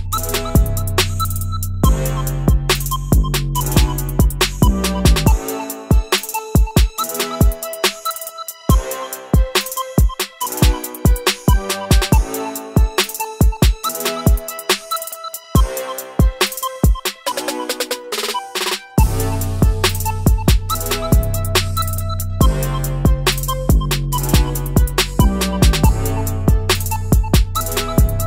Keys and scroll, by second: 1.9 ctrl+z, 21.9 ctrl+z.